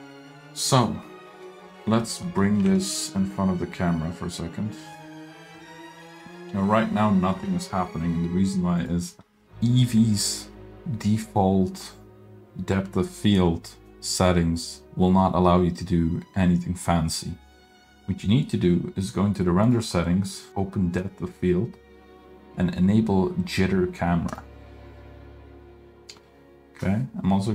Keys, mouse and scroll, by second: 0.9-1.7 middle drag, 1.8 middle click, 2.2 middle click, 2.6 g, 8.8 click, 19.6 click, 20.5 click, 24.4 click.